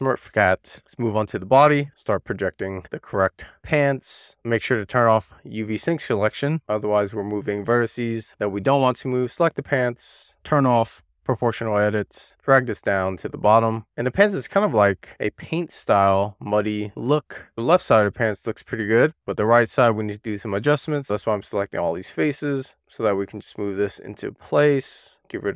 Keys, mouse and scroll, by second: 0.0 middle click, 0.5 shift+middle click, 0.8 click, 0.9 Tab, 1.3 a, 4.2-4.6 scroll down 1, 4.8 shift+middle click, 5.6-6.0 scroll up 2, 6.4-7.1 scroll up 3, 7.5-9.2 scroll down 2, 9.6 click, 10.2 super+z, 12.1 click, 12.5 scroll down 2, 12.8 shift+middle click, 13.2 click, 16.9-17.3 scroll up 2, 17.8 middle click, 19.1-20.8 scroll up 4, 21.2-22.1 drag, 23.5 click, 25.2 middle click.